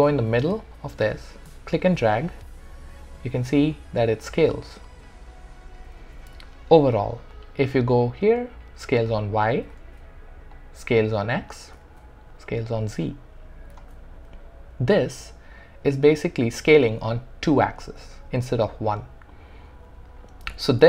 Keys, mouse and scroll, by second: 1.1-6.0 drag, 6.0 ctrl+z, 7.7-9.8 drag, 9.8 ctrl+z, 10.5-11.8 drag, 11.8 ctrl+z, 12.3-13.7 drag, 13.7 ctrl+z.